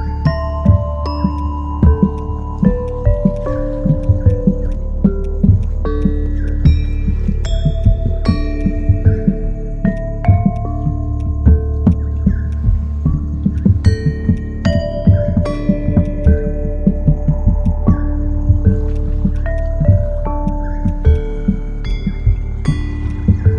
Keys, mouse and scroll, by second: 0.0-0.9 typing, 16.2 double click.